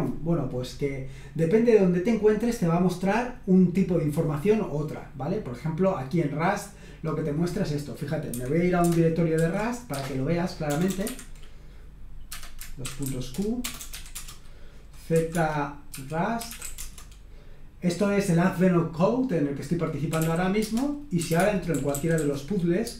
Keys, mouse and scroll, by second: 7.7 click, 8.3 Escape, 8.8 shift+Caps_Lock, 9.4 ;, 9.9 q, 11.0 Escape, 12.3 Caps_Lock, 12.6-17.1 typing, 14.1 Return, 19.9-22.9 typing.